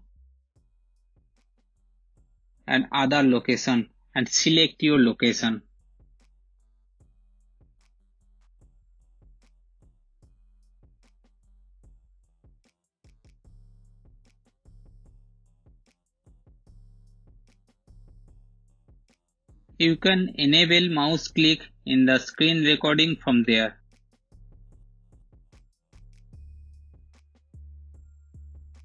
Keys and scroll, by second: 5.8-7.1 typing, 21.0 shift+super+5, 27.7 space.